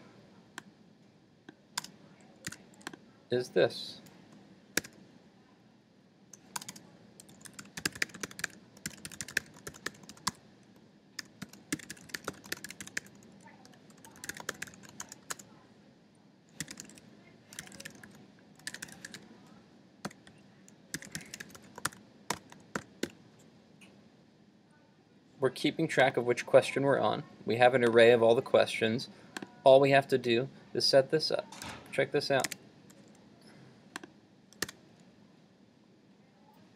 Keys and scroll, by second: 2.5 super+s, 31.7 super+s, 32.6 super+Tab, 34.7 super+r.